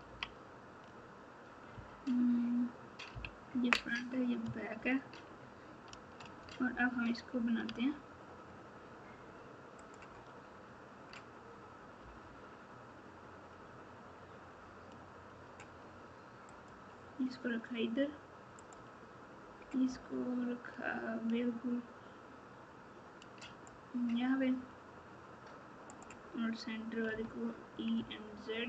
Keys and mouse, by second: 0.0 KP_6, 1.7 KP_3, 3.1 KP_1, 3.7 KP_9, 4.7 ctrl+KP_4, 5.2 ctrl+KP_4, 7.6 Tab, 9.8 click, 12.0 e, 18.6 click, 19.8 e, 25.8 click, 27.1 e.